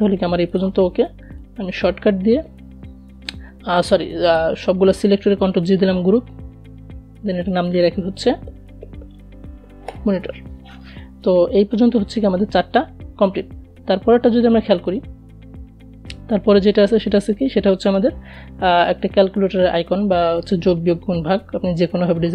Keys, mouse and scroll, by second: 3.6 ctrl+g, 6.3 click, 6.6-8.3 typing, 13.2 click, 15.7 click.